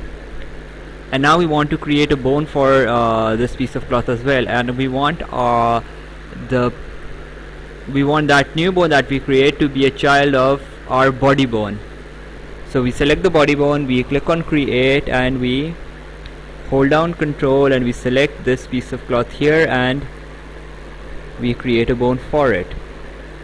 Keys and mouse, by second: 0.3 right click, 10.6 click, 14.1 click, 18.7 ctrl+click, 20.6 click.